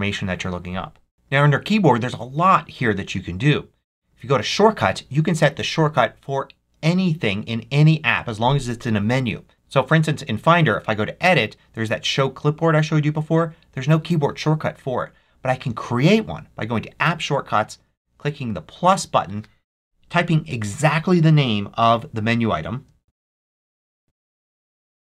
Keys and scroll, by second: 22.8-24.3 typing.